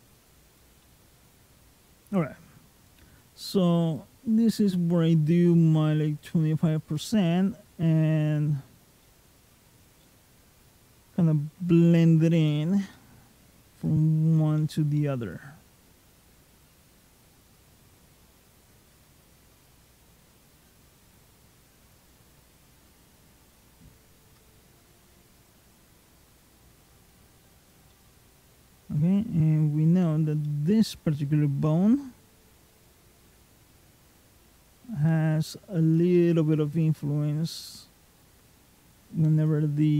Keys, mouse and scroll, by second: 0.7 middle click, 3.8 click, 8.9 middle click, 9.7 click, 12.8 middle click, 13.7 click, 14.4 middle click, 15.2 click, 17.6 click, 19.7 click, 21.1 click, 21.9 click, 23.1 click, 23.9 click, 24.4 middle click, 25.2 click, 27.1 click, 27.7 middle click, 30.3 middle click, 32.7 ctrl+click, 33.5 click, 36.0 middle click, 36.7 click, 38.4 middle click, 39.3 click.